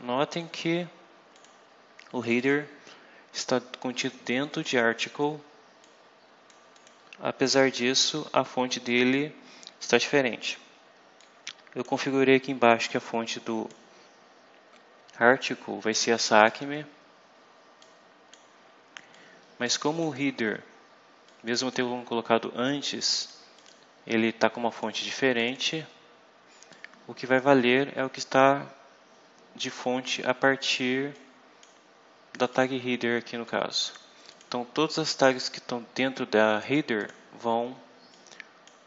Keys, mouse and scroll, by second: 1.2 click, 2.1 click, 4.4 click, 5.7-6.9 drag, 11.1 click, 12.8 click, 16.1 click, 17.7 click, 19.0-20.1 drag, 21.1 click, 22.5 click, 23.4 click, 24.6 click, 25.2 click, 26.6 click, 31.0 click, 32.2 click, 33.3 click, 34.2 click, 35.2-36.7 drag, 36.9 click, 38.0 click.